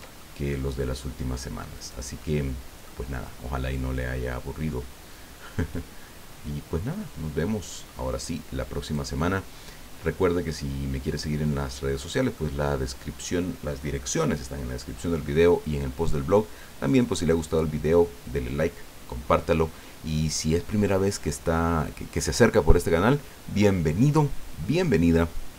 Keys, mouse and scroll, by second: 0.2 middle click, 1.7 right click, 2.2 middle click, 3.7 click, 4.4-5.6 scroll down 6, 6.0 scroll down 2, 9.2-12.5 drag.